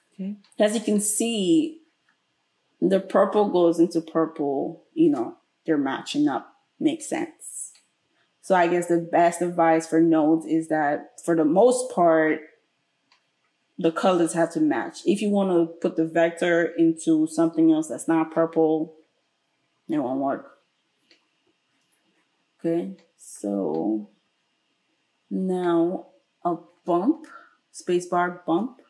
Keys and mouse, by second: 27.2 space.